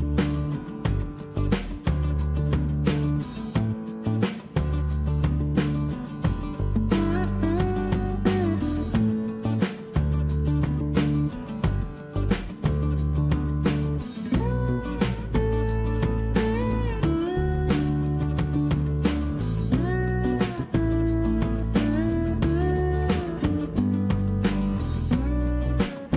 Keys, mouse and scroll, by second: 2.1 2, 3.5-4.7 typing, 24.3 space, 24.3 Escape.